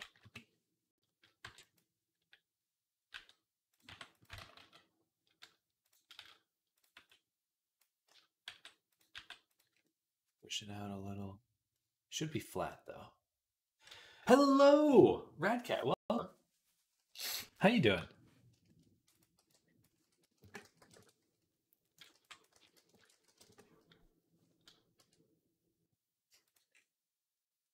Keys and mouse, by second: 0.0 click, 0.0 KP_3, 1.3 b, 3.0 g, 3.6 click, 3.7 r, 4.2 ctrl+z, 4.4 ctrl+z, 6.0 z, 6.8 b, 7.9 z, 8.3 g, 9.0 g, 17.1 KP_3, 17.8-19.0 drag, 17.8 z, 19.2 b, 19.9 s, 20.3 click, 20.5 s, 22.0 b, 22.4 s, 22.9 s, 24.8-27.7 drag, 24.8 e.